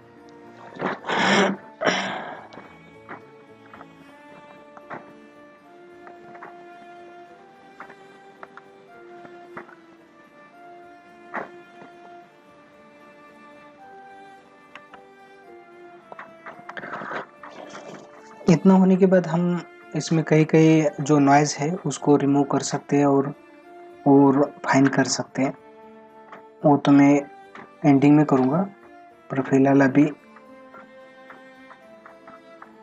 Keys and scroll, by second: 2.5 ctrl+-, 4.1 ctrl+-, 4.7 space, 7.0 ], 8.5 ctrl+alt+z, 11.8 ctrl+=, 23.6 ctrl+=, 28.4 ctrl+alt+z.